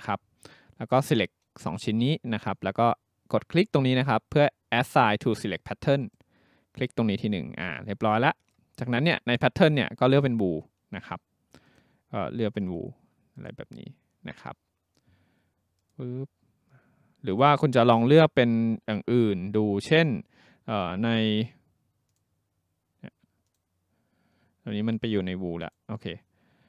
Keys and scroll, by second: 0.0-1.2 typing.